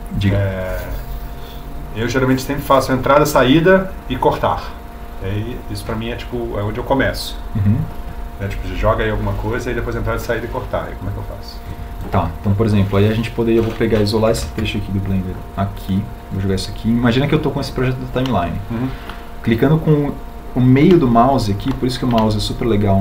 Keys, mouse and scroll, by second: 16.0 shift+d.